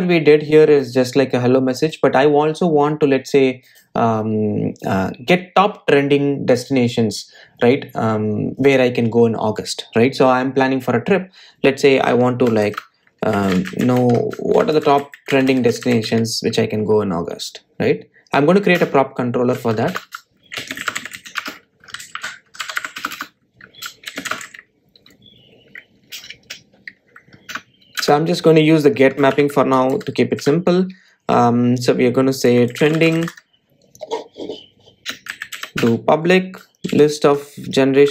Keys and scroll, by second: 22.6 Return, 29.2 Return, 37.0 Return.